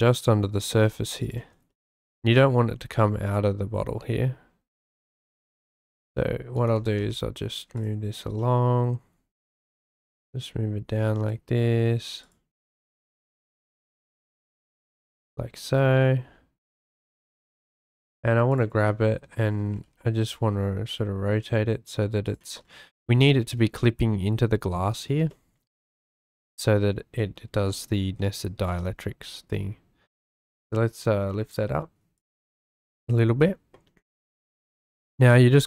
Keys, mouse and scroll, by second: 1.2 shift+middle click, 1.7-2.7 shift+middle drag, 5.8 g, 6.0 x, 6.5 click, 6.7 g, 7.0 y, 7.8 click, 8.4-9.2 shift+right drag, 9.6 g, 9.8 z, 10.0-11.7 shift+right drag, 12.8-13.8 shift+right drag, 15.2 shift+middle drag, 16.7 middle click, 18.5 middle click, 18.9 shift+middle click, 19.7 r, 19.8 x, 23.1-23.4 shift+drag, 25.4-26.0 shift+middle drag, 28.7 g, 28.7 z, 30.0-32.4 shift+middle drag.